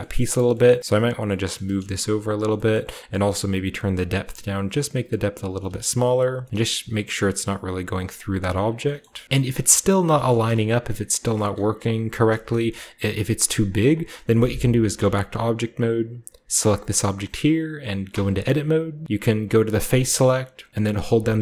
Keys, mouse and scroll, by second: 0.0-0.3 typing, 0.0 scroll up 1, 0.1 middle click, 0.3 scroll down 1, 0.7 middle click, 1.0 right click, 1.0 scroll down 1, 1.5 typing, 2.2 shift+middle click, 2.4-3.4 shift+drag, 2.8-5.2 scroll up 1, 3.7-6.5 drag, 5.6 typing, 6.5-8.5 middle drag, 8.5 shift+click, 9.0 shift+middle click, 9.2-9.8 shift+scroll down 1, 9.8 shift+scroll down 1, 10.0-11.1 shift+drag, 10.2-12.0 shift+scroll up 1, 10.3 shift+middle click, 11.3 s, 14.9 Tab, 14.9 typing, 16.7 right click, 17.8-18.5 typing, 18.7-19.8 scroll up 1, 19.8 click.